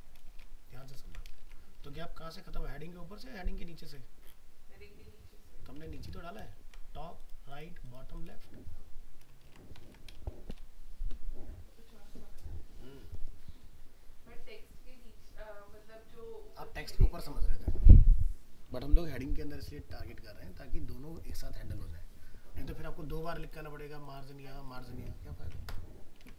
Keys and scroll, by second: 0.7 ctrl+x, 0.9 ctrl+s, 1.4 alt+Tab, 5.8 alt+Tab, 6.4 ctrl+v, 9.4 ctrl+s, 9.8 alt+Tab, 26.2 alt+Tab.